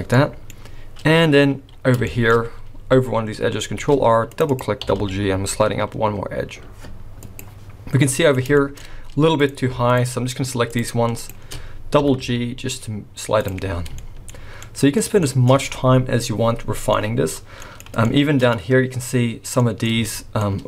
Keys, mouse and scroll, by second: 0.2 middle click, 1.5-2.0 scroll up 1, 2.0 shift+middle click, 3.8 ctrl+r, 4.8 g, 7.8 scroll down 1, 8.1 middle click, 8.6 shift+middle click, 8.9 scroll up 1, 9.4 click, 9.9 shift+click, 10.7 click, 11.5 click, 12.0 g, 13.7 scroll down 4, 13.9 shift+middle click, 14.6 middle click, 15.2 shift+middle click, 16.9 middle click, 17.6 middle click, 18.1 shift+middle click, 18.4-19.6 scroll up 1, 19.6 middle click, 19.6 scroll up 1, 20.1 shift+middle click.